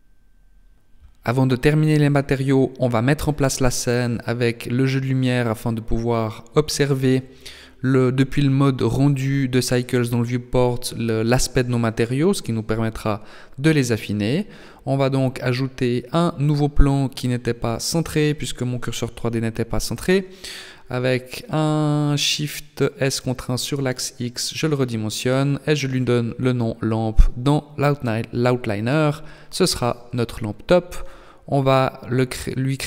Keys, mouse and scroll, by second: 6.4 shift+a, 9.2-9.6 scroll down 2, 11.9 shift+c, 13.9 g, 16.9 middle click, 18.3 s, 21.3 s, 23.1 click, 23.6 click, 29.0 click, 29.7 click, 30.3 click.